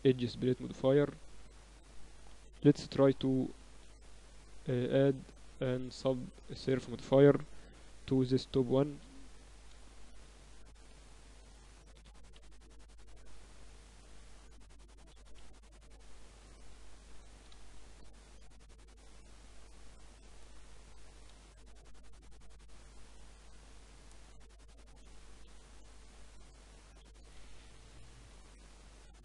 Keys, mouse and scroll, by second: 1.8-3.5 right drag, 3.5 KP_8, 3.8 KP_6, 5.0 KP_4, 5.4 KP_8, 6.1-8.1 middle drag, 8.7 ctrl+2, 10.0 Tab, 12.2 middle click, 13.0-14.4 drag, 13.0 Escape, 13.4 Tab, 14.4 Tab, 15.1-17.6 drag, 16.4 Tab, 17.6-19.2 middle drag, 17.7 Tab, 19.2-20.7 scroll up 1, 20.3 Tab, 21.1-22.6 drag, 21.8 Tab, 22.6-24.8 middle drag, 23.5 ctrl+r, 25.5 Tab, 26.4 Tab, 26.4 middle click, 27.1-29.0 drag, 27.5 t, 28.0 Tab.